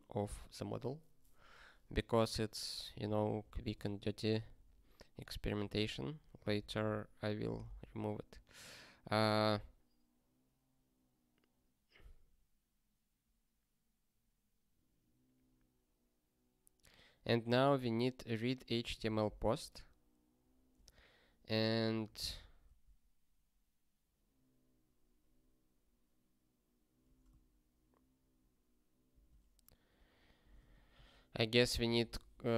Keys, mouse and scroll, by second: 4.6 super+o, 5.6-8.3 typing, 18.7-20.7 typing, 22.0 ctrl+a, 22.4 Return, 22.6 ctrl+p, 29.1-32.5 typing.